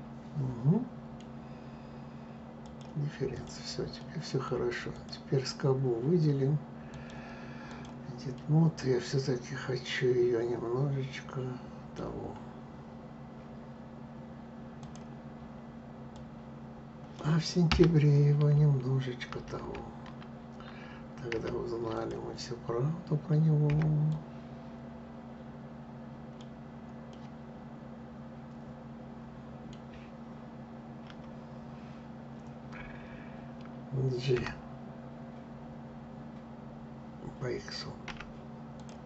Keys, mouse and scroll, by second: 2.3 click, 3.0 click, 3.7 middle click, 4.6 click, 6.6-8.0 drag, 8.0-11.1 middle drag, 14.5 click, 15.8 click, 17.4 Escape, 19.0 ctrl+z, 21.0 ctrl+z, 21.6 click, 23.4 b, 26.8-29.8 middle drag, 30.8 KP_7, 34.0 g, 38.9 click.